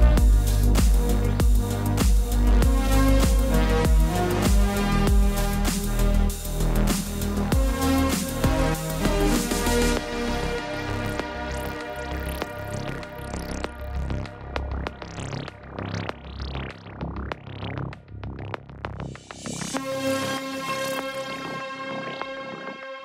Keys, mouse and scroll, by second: 1.2 click, 9.1-11.6 typing, 10.0 click, 13.1 click, 13.1 space, 14.0 space, 14.8 click, 15.0 space, 15.8 click, 16.3 space, 18.8 space, 18.8 click, 19.6 space, 19.9 click, 20.1 space, 21.7 space, 21.8 click, 21.9 space.